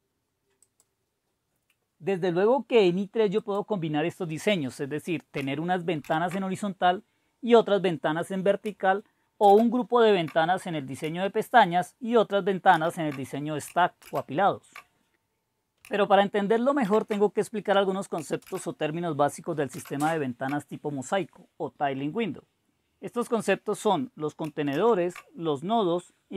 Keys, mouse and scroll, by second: 0.6-2.0 drag, 3.4-4.4 drag, 4.6 click, 6.0 super+2, 9.4 super+Return, 12.7 super+v, 14.0 super+Return, 16.9 super+h, 18.5 super+Return, 19.8 super+Return, 24.7 super+Up.